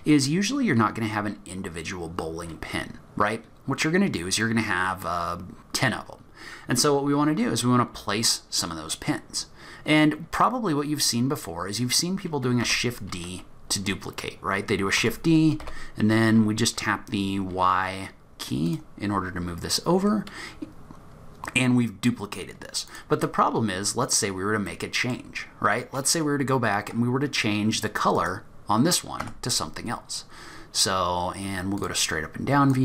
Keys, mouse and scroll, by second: 1.3-2.9 scroll up 1, 8.9-9.4 scroll down 2, 9.4-12.0 scroll up 1, 12.0-12.4 scroll up 1, 12.7 shift+d, 22.9 click, 23.7-24.7 scroll up 4, 24.7 middle click, 25.4-25.9 scroll down 3, 25.7-27.4 scroll up 2, 28.1 click, 29.2 Tab, 31.8 click, 32.7 click.